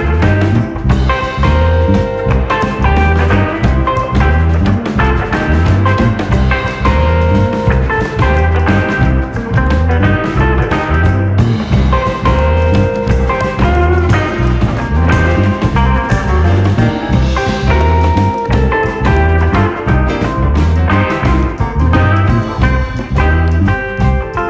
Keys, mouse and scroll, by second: 0.2 scroll down 1, 0.3 shift+middle click, 0.5-1.9 drag, 1.9-2.5 right drag, 2.5-2.9 drag, 2.9-3.9 middle drag, 3.9 KP_3, 5.0-6.1 drag, 7.0 alt+/, 8.1 Tab, 8.3 click, 9.4 r, 10.1 g, 11.0 click, 11.5 g, 12.7 click, 13.3 r, 13.8 KP_1, 14.6 a, 15.1 click, 16.9 alt+/, 17.1 scroll up 1, 17.3 shift+middle click, 18.0 ., 18.9 s, 20.4-21.0 scroll up 2, 20.6 shift+middle click, 21.0 shift+middle click, 21.4 click, 22.1 scroll down 1, 22.3 shift+middle click, 22.7 a, 23.0 right click, 23.6 click, 23.8 click.